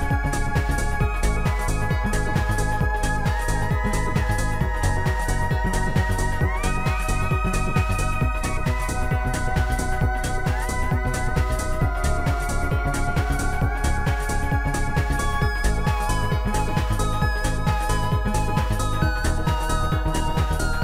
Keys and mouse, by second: 3.0 click, 5.3 click, 5.9 click, 7.6 click, 7.9 click, 8.8 click, 11.8 click, 12.7 click, 12.8 click, 15.4 click, 15.6 click, 17.8 click, 18.4 click, 19.3 click.